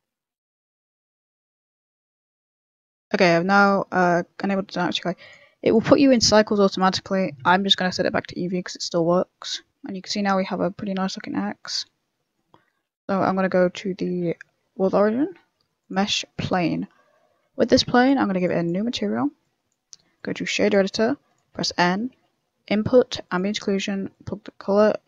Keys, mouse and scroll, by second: 0.6 click, 0.6 n, 2.3 click, 2.3 n, 3.5 click, 5.3 click, 7.0 click, 7.0 middle click, 7.5 z, 8.0 middle click, 8.9 scroll up 4, 9.1 middle click, 9.4 scroll down 1, 9.5 middle click, 10.2 middle click, 12.2 scroll down 3, 12.3 middle click, 12.7 shift+s, 13.2 shift+s, 13.8 middle click, 14.1 shift+s, 14.6 shift+middle click, 14.8 shift+a, 16.2 middle click, 16.5 scroll up 2, 16.6 middle click, 17.3 z, 17.9 click, 19.1 click, 19.5 click, 20.9 click, 20.9 b, 21.4 n, 21.5-22.1 scroll up 7, 21.6 middle click, 22.1 shift+a, 24.1 click.